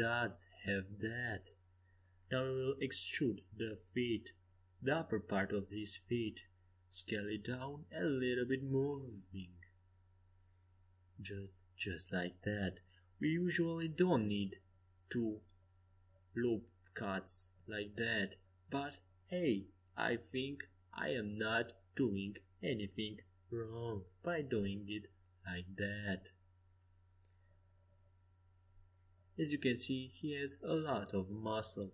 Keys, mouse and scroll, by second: 5.4 e, 7.3 s, 9.2 g, 14.2 g, 15.8 g, 16.3-17.6 middle drag, 18.6 e, 20.7 s, 23.2 g, 25.6 e, 26.9 s, 30.0 g.